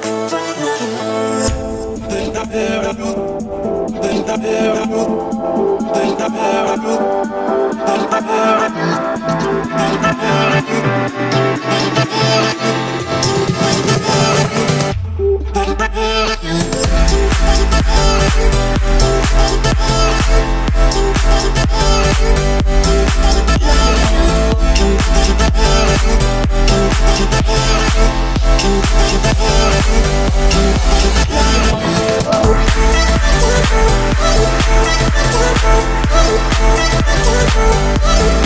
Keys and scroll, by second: 6.9 Escape, 7.7 Escape, 11.0 Escape, 19.0 Escape, 23.0 Delete, 24.5 Escape.